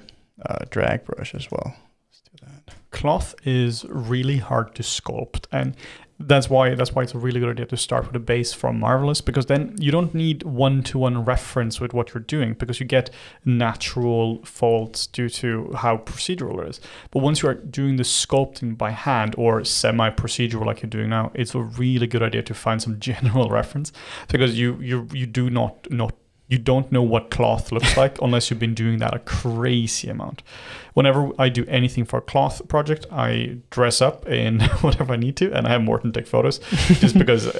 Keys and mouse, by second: 0.5 f, 1.4 shift+f, 2.7 g, 2.9-4.0 middle drag, 4.0 g, 5.3 f, 6.1 click, 6.8 middle click, 7.5-9.1 shift+drag, 9.1-12.5 middle drag, 12.5-13.5 shift+drag, 13.5 middle click, 14.0-15.1 shift+drag, 15.1 middle click, 15.7 g, 16.3 f, 17.0-18.7 drag, 18.7 middle click, 19.1 click, 19.4 middle click, 19.7 f, 20.3 click, 21.3-22.9 middle drag, 22.9 click, 23.3-24.6 middle drag, 24.6 click, 24.8 middle click, 25.7 click, 26.4 f, 27.3 click, 27.9 f, 28.5-29.6 drag, 29.6 middle click, 29.9 f, 30.6-32.2 drag, 32.2-36.0 middle drag, 36.0 f.